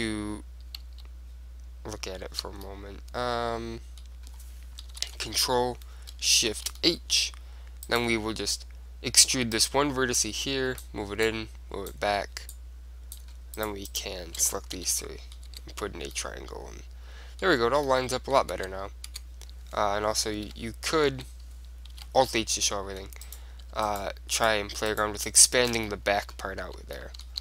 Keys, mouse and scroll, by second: 1.0 right click, 1.0 z, 2.4 z, 2.8-4.4 middle drag, 5.1 ctrl+l, 6.7 shift+h, 7.1-9.3 middle drag, 8.0 click, 8.6-9.7 right drag, 9.3 e, 9.9 right click, 10.3-11.5 middle drag, 11.5-13.7 drag, 13.7 middle click, 14.3 click, 14.3-15.9 right drag, 14.9 f, 15.1-17.4 middle drag, 15.6 Tab, 18.7 Tab, 19.2 Tab, 20.4 alt+h, 21.2 Tab, 22.1 alt+h, 22.8-27.4 middle drag, 23.4-24.4 drag, 26.0-27.1 drag, 26.8 z.